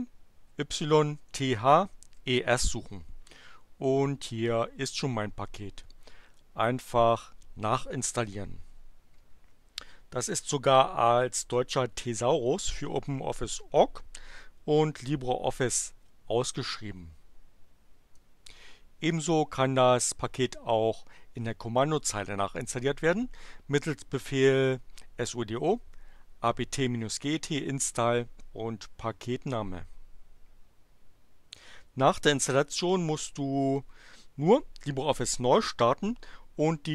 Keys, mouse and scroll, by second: 0.0-2.1 typing, 4.8 click, 18.1-19.3 drag.